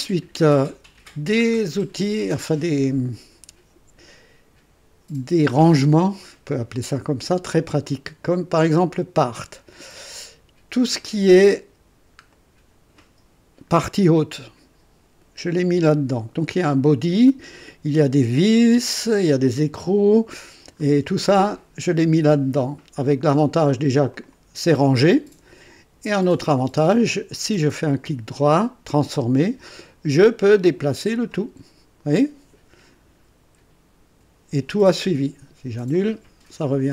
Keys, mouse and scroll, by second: 1.4-1.8 scroll up 1, 10.8 click, 11.9 scroll down 2, 12.3-12.9 right drag, 18.5 scroll down 2, 20.4 scroll up 2, 24.1 click, 26.2 click, 27.5 right click, 28.9 click, 30.5-31.5 drag, 34.1 Escape, 35.9 click.